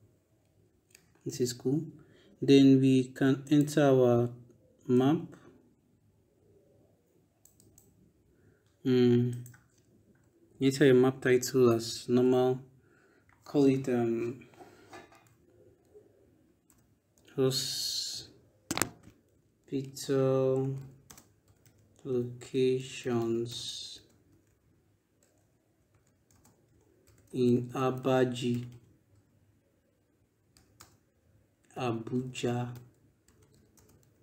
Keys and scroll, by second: 10.4 ctrl+BackSpace, 16.5 h, 18.8 p, 19.1 i, 19.7 t, 20.9 space, 21.3 l, 21.4 o, 22.8 i, 23.0 o, 23.7 space, 24.1 s, 25.2-28.3 typing, 30.4 ,, 30.6 space, 31.4 a, 32.5-34.2 typing.